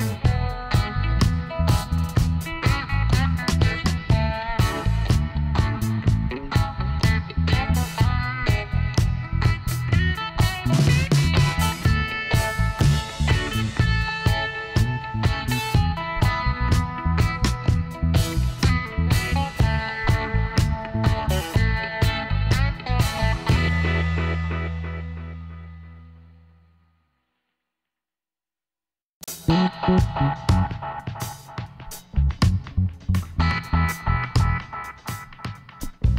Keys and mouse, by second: 0.0-1.7 drag, 2.5 Tab, 3.2 a, 3.4 click, 6.4 middle click, 8.3-10.1 drag, 9.8-11.4 right drag, 11.9 Tab, 12.4-13.5 middle drag, 14.0 KP_1, 15.0 middle click, 16.7 a, 20.4 e, 24.0 Tab, 26.4 click, 28.1 Tab, 32.9-34.7 drag.